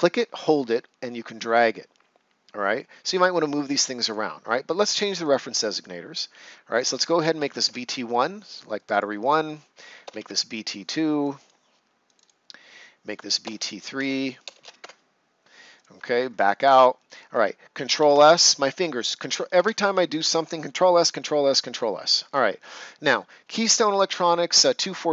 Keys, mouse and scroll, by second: 7.3 BackSpace, 7.4 1, 7.6 Return, 8.7 click, 10.0 BackSpace, 10.0 2, 10.2 Return, 12.0 click, 13.4-14.6 typing, 14.7 Return, 15.7 click, 16.1 ctrl+scroll down 1, 16.6 right click, 17.9 ctrl+s, 19.5 ctrl+s, 21.7 right click.